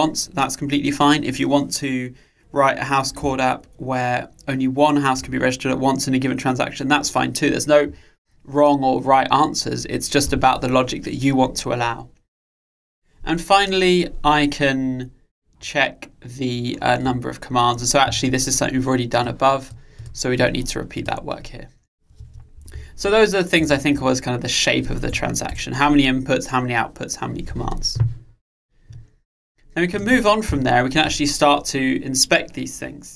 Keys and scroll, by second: 23.1 Delete.